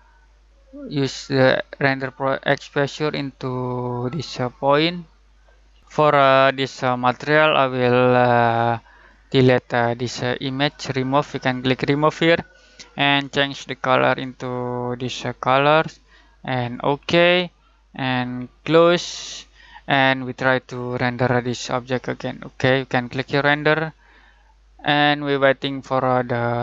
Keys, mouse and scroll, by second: 1.8-5.8 drag, 6.9-20.8 drag, 23.1 click, 25.4 typing.